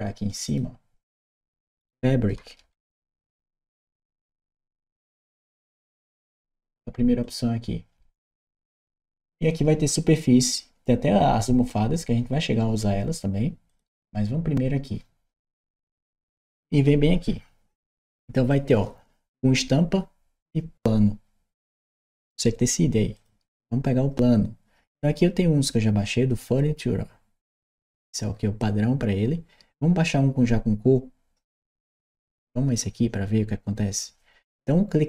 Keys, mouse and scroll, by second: 0.3 click, 1.1 click, 2.4 a, 2.9 r, 3.4 c, 7.0 click, 13.5 click, 16.3 click, 23.0 click.